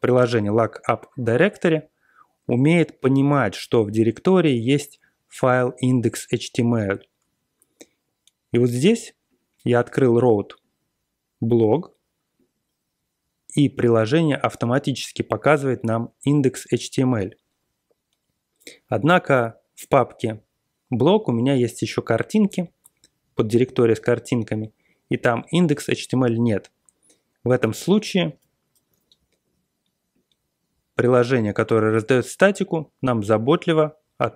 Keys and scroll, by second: 7.2 super+Tab, 28.4 super+-, 28.7 super+-.